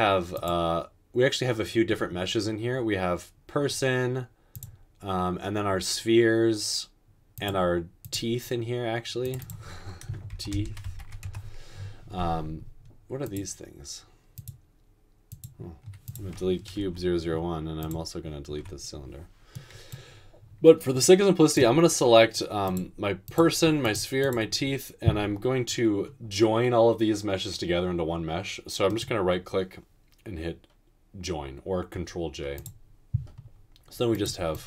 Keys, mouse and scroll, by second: 10.4-10.9 typing, 11.2 Return, 16.8 Delete, 18.7 Delete.